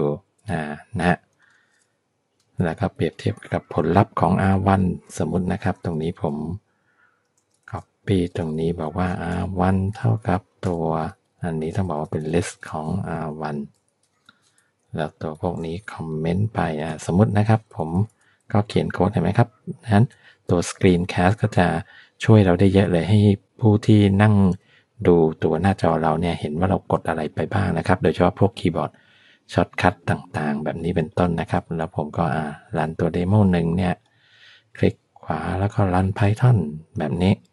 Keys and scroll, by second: 3.1 Down, 4.3 alt+Up, 5.3 Left, 6.3 Down, 7.6 alt+shift+Down, 8.2 Up, 8.5 Right, 9.3 BackSpace, 9.5 1, 9.8 Right, 10.7-14.1 typing, 11.1 Left, 14.7 Down, 15.3 shift+Down, 16.6 ctrl+/, 17.8 Up, 20.2 ctrl+/.